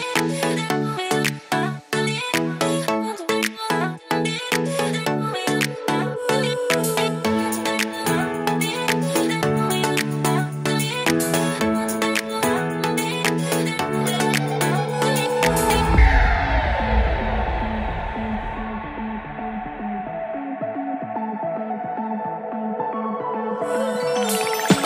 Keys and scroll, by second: 9.2 super+x, 9.5 super+Right, 9.7 super+v, 10.4 super+Right, 10.9 super+s, 13.9 super+Left, 14.0 shift+super+Right, 14.1 super+c, 14.6 super+v, 16.6 super+s.